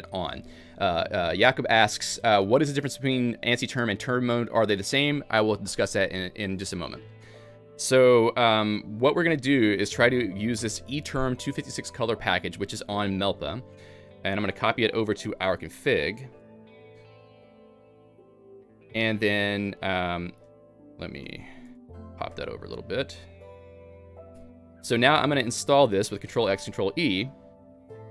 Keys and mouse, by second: 13.9-14.6 typing, 15.6 ctrl+alt+j, 16.6 Return, 17.2 Escape, 17.6-21.2 typing, 18.4 Escape, 19.1 Escape, 20.6 Tab, 21.6 Escape, 22.2-25.1 typing, 22.4 Tab, 27.8 ctrl+e.